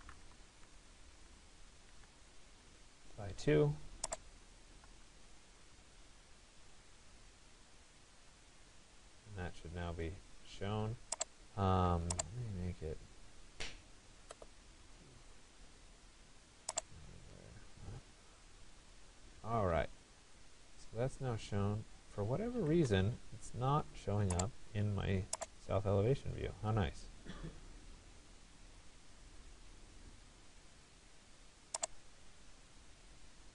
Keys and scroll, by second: 0.0-2.0 typing, 2.3 Return, 4.9 2, 5.1 Return, 22.3 Escape.